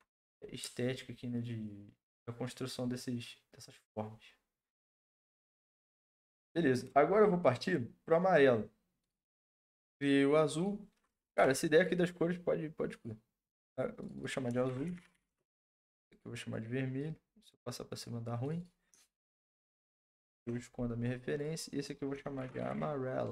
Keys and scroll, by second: 11.3 Delete, 14.4-15.6 typing, 19.0-20.7 typing, 21.9-23.3 typing.